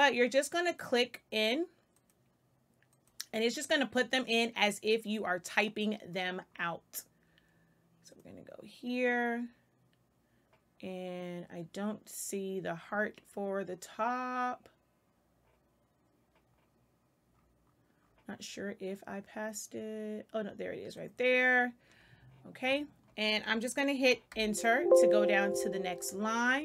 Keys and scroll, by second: 24.2 Return.